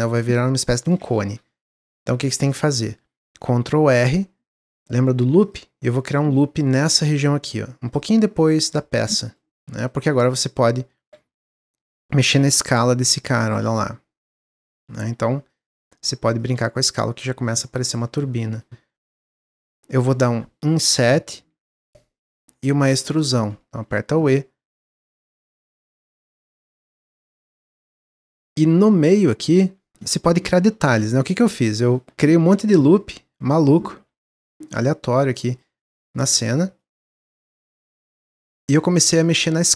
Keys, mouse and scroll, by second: 0.1 s, 1.7 ctrl+z, 2.0-2.5 scroll up 3, 2.5 scroll down 1, 3.5 ctrl+r, 8.7-10.0 middle drag, 10.0 w, 10.1 click, 11.2 3, 11.3 click, 11.7 click, 12.6 s, 15.4 click, 17.4-19.5 middle drag, 19.5 scroll up 1, 19.7 shift+middle click, 20.0-20.7 scroll up 2, 21.2 i, 22.1 middle click, 22.7 w, 23.7 e, 25.1-25.4 scroll down 1, 25.4 middle click, 25.6 Tab, 25.8-29.2 middle drag, 29.2 Tab, 29.5 Tab, 30.5 ctrl+r, 31.7 click, 31.9 Tab, 32.3 ctrl+r, 34.0 ctrl+r, 35.9 ctrl+r, 37.3 ctrl+r, 39.2 alt+click.